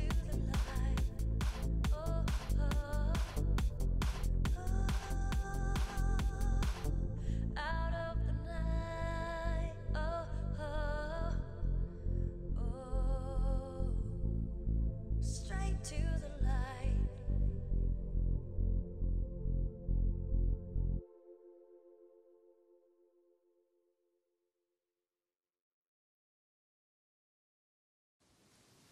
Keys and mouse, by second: 1.1 shift+e, 2.7 Tab, 3.3 Tab, 4.1 z, 4.4 right click, 5.1 g, 5.6 right click, 6.6 z, 8.4 g, 9.7 a, 9.8 a, 10.7 ctrl+n, 11.1 Tab, 11.6 middle drag, 12.3 Tab, 13.1-14.4 right drag, 14.4 ctrl+Tab, 15.6 shift+e, 16.1 Tab, 16.6 Tab, 18.3 shift+e, 19.9 Tab, 20.3 z, 20.7 Tab, 21.4 ctrl+Tab, 21.7-22.5 drag, 22.2 Tab, 24.5 Tab, 25.0-28.5 right drag.